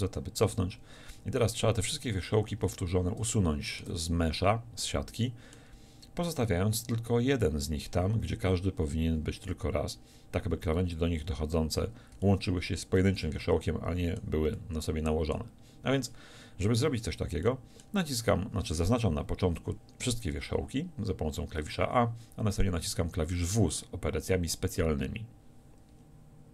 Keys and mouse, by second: 0.0 ctrl+z, 2.6 a, 10.6 a, 22.6 w.